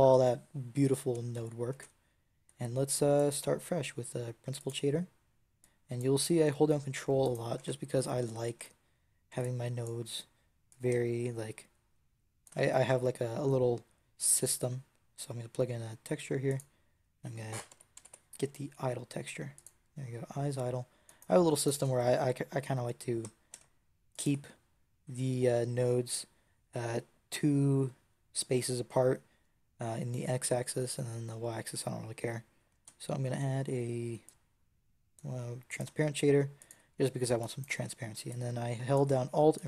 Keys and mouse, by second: 1.6 shift+a, 4.6 click, 7.1 click, 7.5 ctrl+t, 8.5 a, 9.2 b, 9.9 x, 10.7 click, 22.8-24.0 right drag, 22.8 g, 24.1-26.0 drag, 32.6 shift+a, 36.6-38.8 drag, 37.3-38.8 right drag.